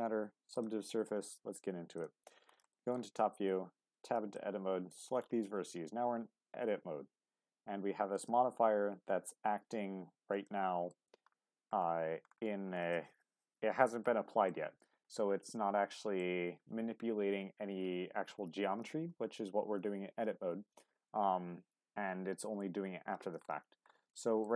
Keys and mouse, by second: 2.7 shift+middle click, 3.8 Tab, 4.4-6.0 drag, 6.0 g, 8.1 right click, 10.5 shift+middle click, 14.0 shift+middle click, 15.9 shift+middle click, 24.2 shift+middle click.